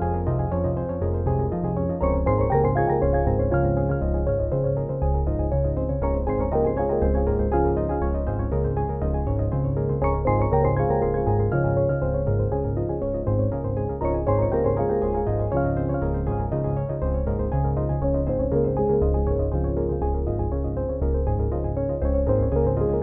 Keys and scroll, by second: 11.9 ctrl+h, 22.6 ctrl+j.